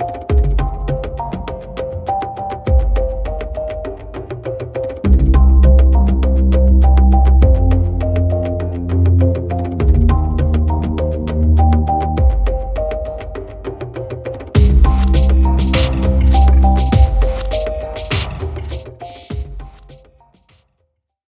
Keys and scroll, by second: 2.8 ctrl+z, 20.1 ctrl+-.